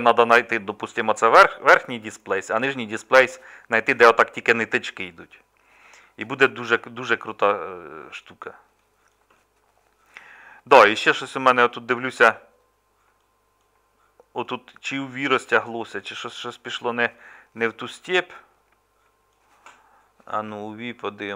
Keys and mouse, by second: 6.2 middle click, 7.1-8.5 middle drag, 15.3-17.0 middle drag, 17.6-21.3 middle drag.